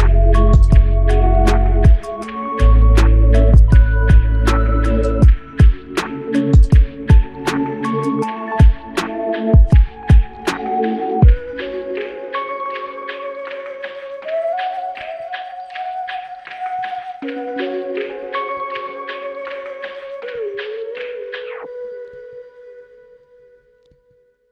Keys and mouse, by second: 6.7 ctrl+click, 12.1 alt+click.